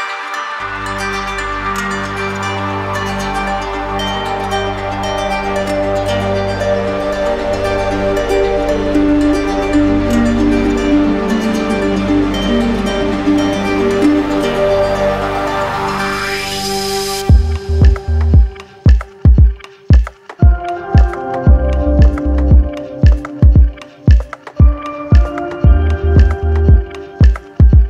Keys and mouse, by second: 0.1 click, 5.0 click, 7.1 alt+click, 8.4 click, 10.4 alt+click, 12.0 click, 13.5 alt+click, 14.5 click, 15.0 alt+click, 15.7 alt+click, 19.7 alt+click, 20.2 click, 20.8 alt+click, 24.2 click, 25.1 click.